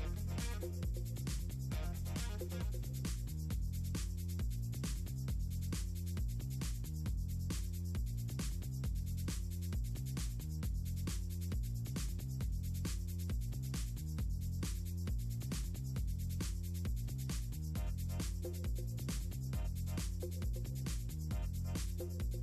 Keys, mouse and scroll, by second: 0.1 click, 2.5 click, 3.3 click, 3.5 click, 5.6 click, 6.5 click, 9.2 click, 9.4 click, 10.0 right click, 10.2 click, 10.8 middle click, 11.2 click, 11.8 click, 13.2 right click, 13.5 click, 13.7 click, 14.3 click, 14.8 click, 16.8 click, 17.2 click, 17.7 click, 19.6 middle click, 20.8 click, 21.4 ctrl+click.